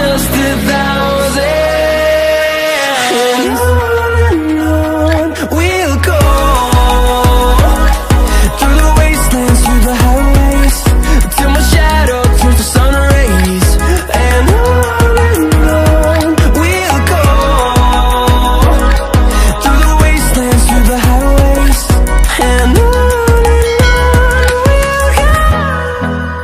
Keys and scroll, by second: 6.7 ctrl+shift+f, 17.9 ctrl+shift+x, 19.8 ctrl+shift+x.